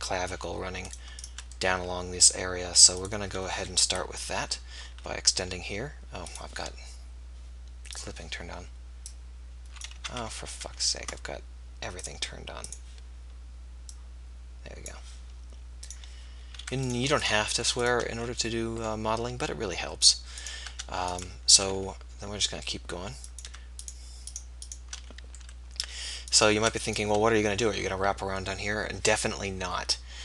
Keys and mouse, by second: 1.9 middle click, 4.0 KP_1, 5.0 e, 10.4 ctrl+z, 10.7 ctrl+z, 14.9 click, 18.1 f, 21.9 e, 25.1 f.